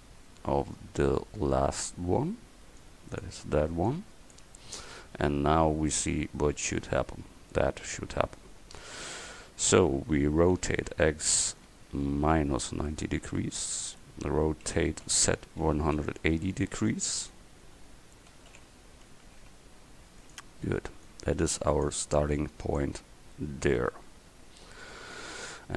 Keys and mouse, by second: 2.8 click, 10.6 r, 14.7 r, 18.4 r, 21.1-23.7 drag.